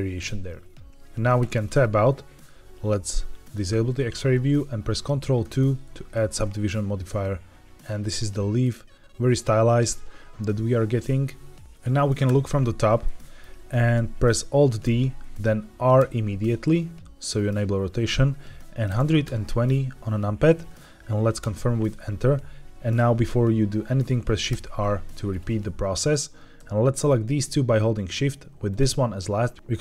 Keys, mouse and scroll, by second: 1.3 Tab, 3.3 click, 4.3 middle click, 5.3 ctrl+2, 6.3-8.5 middle drag, 11.1 ctrl+1, 11.5 ctrl+2, 11.6 middle click, 12.2 KP_7, 13.0-13.3 shift+middle drag, 14.7 alt+d, 15.9 r, 18.8 KP_1, 18.9 KP_2, 19.1 KP_0, 21.3 KP_Enter, 24.4 shift+r, 27.2 shift+click, 28.6 shift+click.